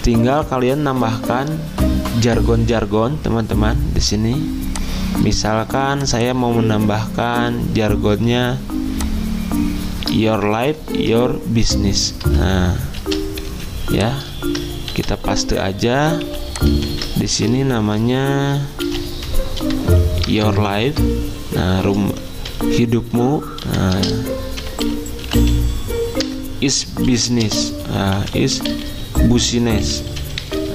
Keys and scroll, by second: 13.0 ctrl+x, 13.5 Escape, 14.9 ctrl+f, 16.2 typing, 16.9 ctrl+a, 18.8-20.9 typing, 22.5 typing, 24.6-30.7 typing, 26.2 Return.